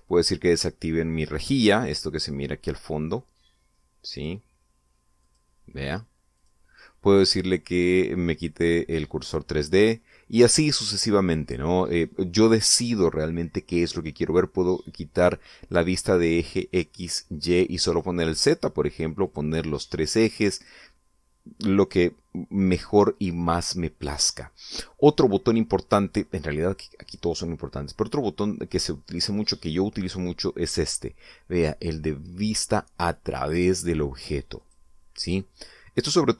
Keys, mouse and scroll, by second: 4.9 click, 6.0 click, 7.2 click, 10.0 click, 10.6 click, 16.7 click, 17.7 click, 18.7 click, 19.7 click, 20.0 click, 21.3 click, 25.1-25.5 scroll up 1, 25.7-27.0 middle drag, 35.4 click, 36.2-36.3 middle drag.